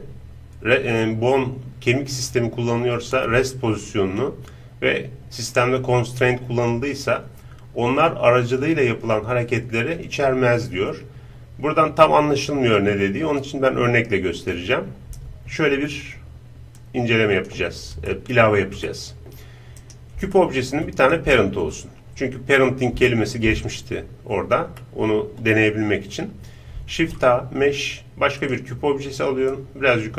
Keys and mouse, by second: 16.8-18.9 drag, 18.1-26.9 middle drag, 18.1 right click, 19.8-21.8 right drag, 26.9 shift+a, 29.5-30.1 drag.